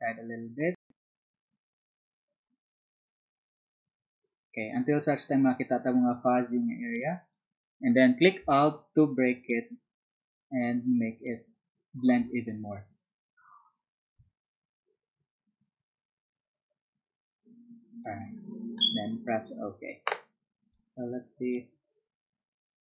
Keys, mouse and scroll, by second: 16.0-22.8 alt+drag.